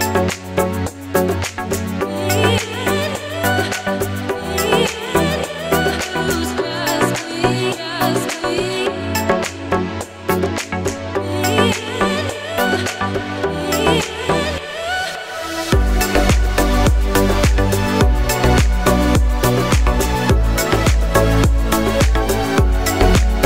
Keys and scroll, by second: 0.6 ctrl+a.